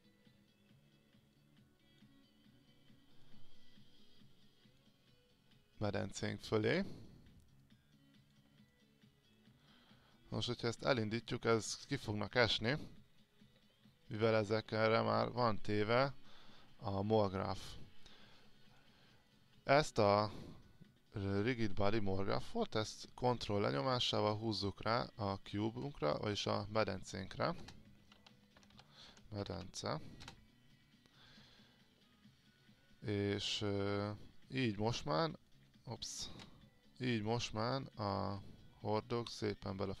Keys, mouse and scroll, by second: 8.9 alt+click, 11.0 click, 24.0 ctrl+click, 27.8-29.3 typing, 33.7-36.1 drag, 36.5 ctrl+z, 37.4-40.0 drag.